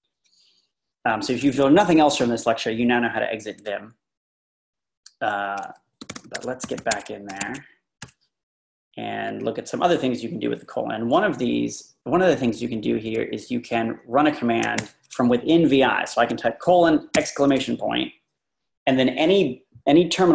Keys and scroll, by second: 5.8-7.4 typing, 8.0 Return, 13.1 Page_Down, 13.2 Page_Down, 13.3 Page_Down.